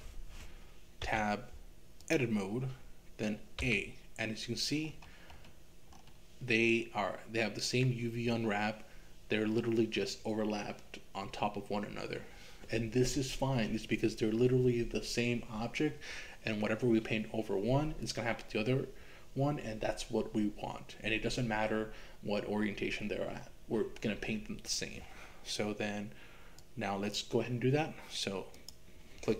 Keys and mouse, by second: 1.1 Tab, 3.6 a, 26.7 click, 28.5 click.